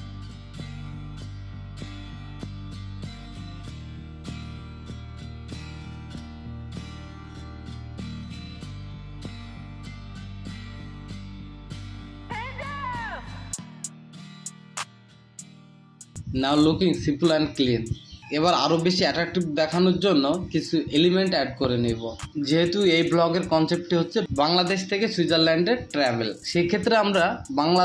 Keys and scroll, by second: 10.8 space, 17.4 ctrl+m, 21.6 Return, 22.3 space, 24.6 space.